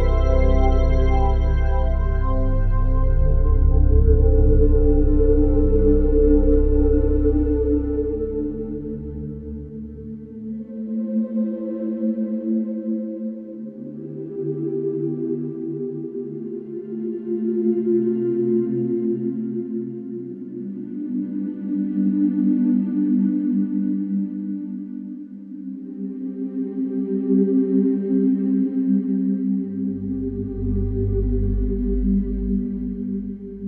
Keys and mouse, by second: 0.1 click, 1.0 click, 2.0 ctrl+click, 2.6 ctrl+click, 3.5 ctrl+click, 5.0 ctrl+p, 6.1 Down, 6.4 Return, 7.8 click, 9.0 s, 9.2 x, 9.6 -, 10.0 1, 10.5 click, 11.3 g, 11.6 x, 16.5 shift+click, 17.8 ctrl+alt+click, 18.2 alt+click, 19.5 ctrl+s, 19.9 ctrl+alt+drag, 20.8-21.5 drag, 21.5 typing, 22.7-25.7 drag, 26.4-27.4 drag, 27.4 1, 27.9-32.8 ctrl+alt+drag, 31.0 ctrl+s, 32.8 ctrl+alt+middle click.